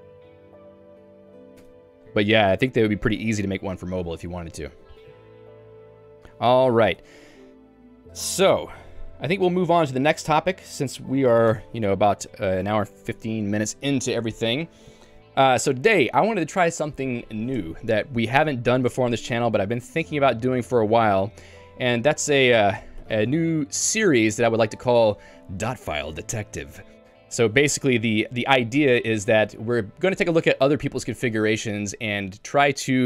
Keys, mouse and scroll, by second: 1.3 q, 1.6 Escape, 7.2 Escape, 11.5 Return, 23.1 ctrl+j.